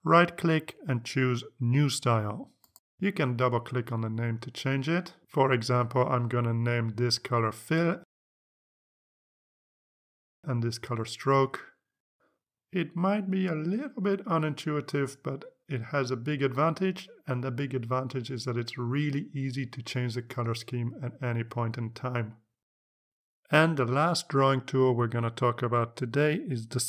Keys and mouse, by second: 0.7 right click, 3.6 click, 5.7 click, 6.4 click, 7.9 click, 9.2 i, 9.6 Return, 10.4 click, 11.8-13.4 typing, 14.0 click, 14.5 click, 15.9 click, 16.2 click, 18.6-22.4 drag.